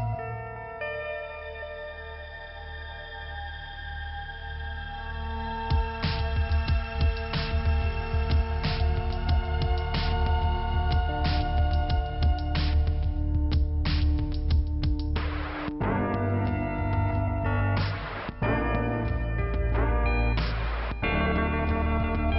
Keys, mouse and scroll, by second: 0.1 scroll up 2, 1.2 click, 4.2 click, 5.4 click, 7.4 click, 10.3 scroll down 1, 11.6 click, 11.6 scroll up 1, 13.5 click, 14.5 click, 16.6 click, 17.6 click, 20.2 click, 20.3 click, 20.4 double click, 20.5 double click.